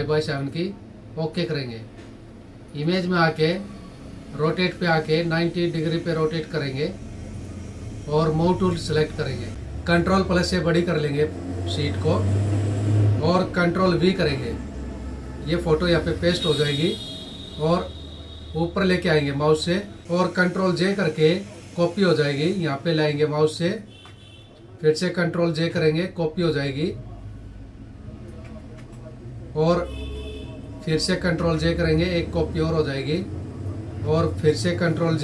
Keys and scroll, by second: 10.0 ctrl+=, 13.6 ctrl+v, 20.2 ctrl+j, 23.6 Up, 25.0 ctrl+j, 27.9 Up, 28.2 Left, 30.8 ctrl+j, 33.8 Right, 34.8 ctrl+j.